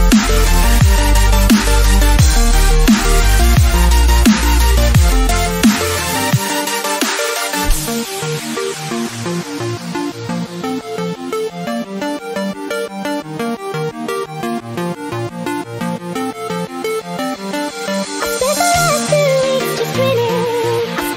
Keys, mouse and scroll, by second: 0.7-5.3 drag, 5.3-10.6 drag, 10.6 Return, 11.4 click, 11.9 alt+scroll down 1, 12.1 scroll up 2, 12.5-13.0 scroll down 1, 13.0-15.2 drag, 15.5 alt+scroll down 1, 17.0 click, 17.8 Right, 20.4-21.1 drag.